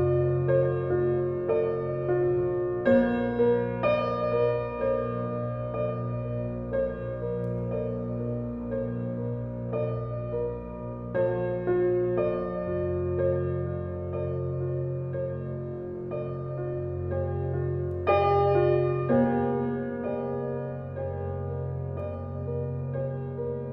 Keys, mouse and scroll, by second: 0.0 alt+click, 0.7 alt+right click, 1.0-2.7 alt+drag, 2.7 alt+middle click, 3.2 alt+click, 3.9 alt+middle click, 4.6-6.2 alt+drag, 6.2 alt+middle click, 6.4 alt+right click, 6.9 alt+click, 7.1 alt+right click, 8.2 alt+click, 8.8 alt+right click, 9.1 alt+click, 9.7 alt+middle click, 10.0 alt+right click, 10.8 alt+click, 11.1 alt+middle click, 11.9-13.6 right drag, 13.6 click, 14.7 w, 16.2-20.7 shift+drag, 20.7-23.7 alt+drag.